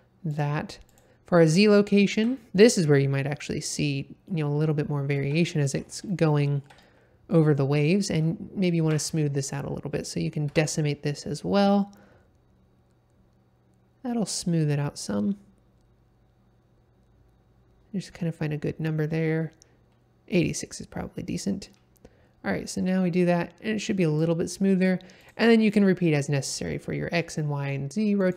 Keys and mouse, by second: 0.2 click, 0.8 click, 1.8-2.3 ctrl+middle drag, 2.8-3.9 middle drag, 4.2 ctrl+middle click, 5.5 middle click, 6.2-7.3 ctrl+middle drag, 8.8 F3, 20.4 click, 22.7-24.2 drag, 25.2-25.9 drag.